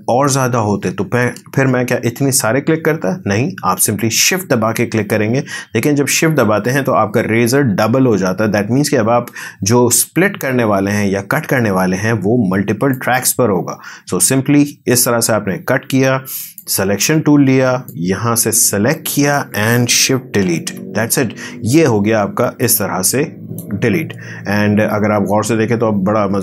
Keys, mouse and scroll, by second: 1.2 ctrl+z, 12.9-20.6 shift+drag, 20.6 shift+Delete, 22.6 click, 23.8 space.